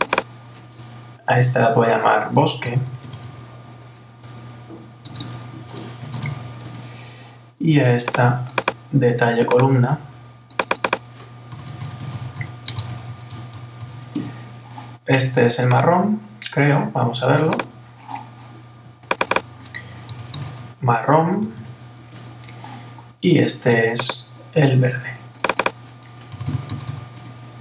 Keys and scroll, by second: 6.6 Return, 14.2 Return, 22.0 Return, 27.2 Return.